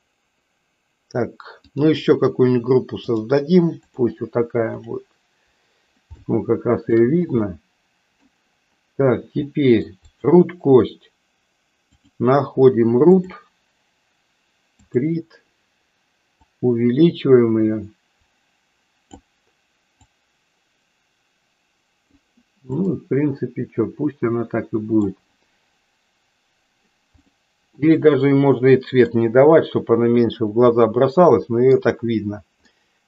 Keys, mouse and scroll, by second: 1.6 click, 3.1-4.1 drag, 4.6 click, 6.2 shift+middle click, 7.6 middle click, 9.5 middle click, 10.0 click, 12.0-13.3 drag, 14.7 click, 16.6-19.1 drag, 20.2-22.1 drag, 22.9-25.2 middle drag, 27.1 click, 27.8-29.1 middle drag, 30.7-31.8 middle drag, 32.7 middle click.